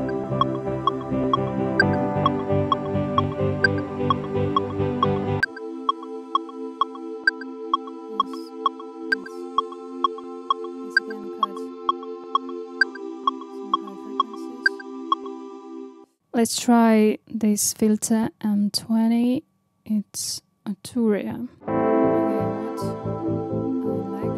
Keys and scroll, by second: 5.4 space, 16.1 space.